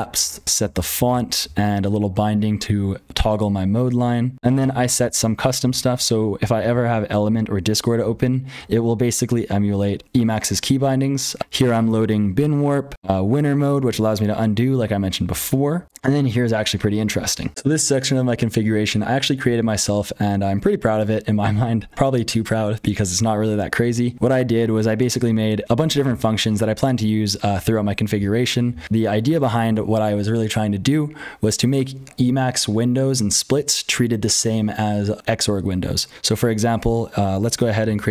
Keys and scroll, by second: 0.0-38.1 typing, 0.3 ctrl+[, 37.5 ctrl+z.